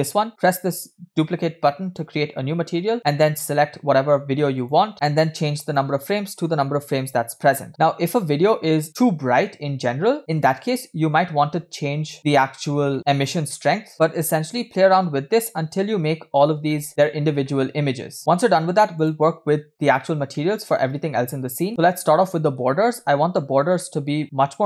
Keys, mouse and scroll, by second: 1.8-2.2 drag, 2.8 middle click, 4.6 click, 4.9 middle click, 5.7-7.7 drag, 7.7 0, 8.7 scroll up 2, 9.5 shift+middle click, 10.5 click, 12.3 click, 12.9 middle click, 13.1 click, 13.9 0, 14.5 scroll up 1, 14.8 scroll down 2, 15.7 scroll down 1, 16.2 scroll down 1, 16.7-17.0 shift+middle drag, 17.4-18.2 shift+middle drag, 19.0 click, 19.9 scroll down 2, 20.3-22.6 middle drag, 21.7 scroll up 2, 23.5 scroll down 2, 23.8 middle click.